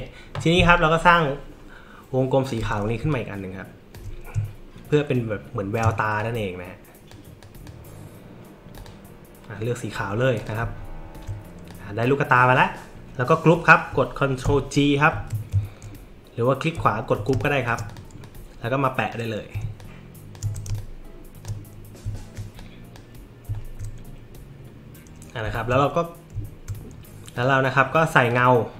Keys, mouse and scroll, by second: 2.5 click, 3.1 alt+click, 4.9 shift+click, 6.2-7.1 drag, 7.4 click, 8.7 click, 10.4 click, 10.7 alt+middle click, 10.7-11.3 alt+scroll up 4, 11.0 alt+middle click, 11.7 click, 15.1 ctrl+g, 16.9 alt+scroll up 2, 17.3 space, 17.4 click, 17.9 click, 18.2 click, 19.8 alt+shift+click, 20.7 space, 20.7 click, 22.6-22.9 drag, 23.6 alt+scroll, 25.5 alt+scroll, 27.3 click, 28.3 click.